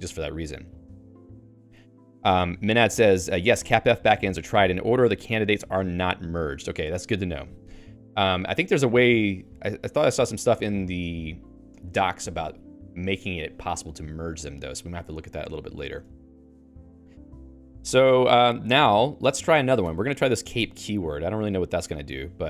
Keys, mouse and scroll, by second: 0.0-0.7 typing, 13.8 k, 14.3 k, 15.8 o, 16.0 Return, 16.1 Escape, 16.8 a, 19.8 Escape, 20.0-22.0 typing.